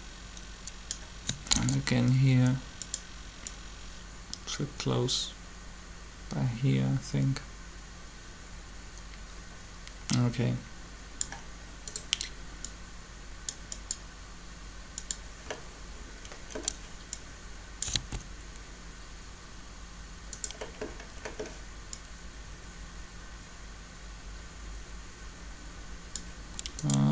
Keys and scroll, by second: 1.5 shift+d, 17.9 alt+a.